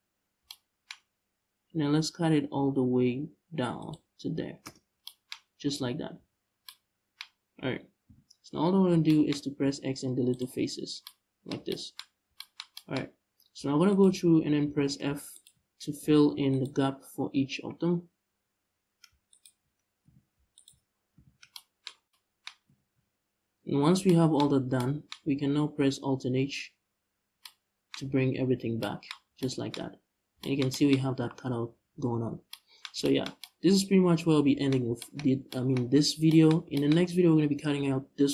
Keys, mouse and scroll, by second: 4.4 middle click, 4.4 space, 5.0-5.5 scroll up 1, 5.5 scroll down 1, 5.8 z, 6.1 scroll down 1, 6.9-7.7 scroll up 2, 7.7 KP_5, 8.4-8.7 scroll down 1, 9.3 x, 10.3 scroll down 1, 11.7-12.0 scroll up 1, 12.7-13.2 scroll up 1, 13.5 alt+right click, 14.3 f, 14.9 alt+right click, 15.6 f, 16.1-16.5 alt+right drag, 17.4-17.8 scroll up 1, 18.3-19.0 scroll down 1, 19.0 alt+right click, 19.7 f, 20.2 alt+right click, 20.8 f, 22.3 scroll down 2, 22.3 Tab, 25.6 scroll down 2, 25.9-27.0 scroll up 2, 28.1 alt+h, 28.8 a, 29.5 Tab, 29.9 scroll down 1, 30.7 scroll up 1, 30.8 a, 31.3 middle click, 32.0 scroll down 1, 35.1-36.0 right drag.